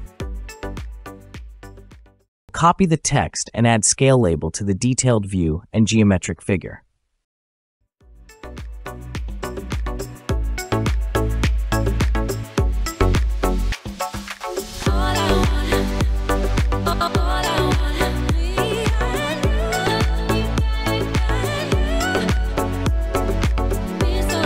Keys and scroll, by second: 0.9 Return, 2.7 typing, 3.6 Return, 5.9 Escape, 8.3-9.4 typing, 10.7-14.8 typing, 11.2 Return, 17.8 typing, 23.6-24.4 typing.